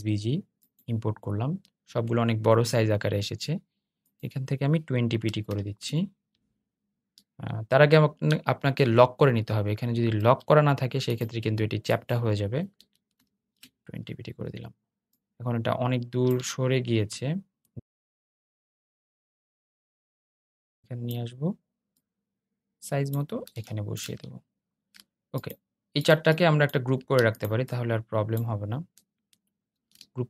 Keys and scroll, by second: 9.2 super+z, 19.5 super+z, 28.8 super+g.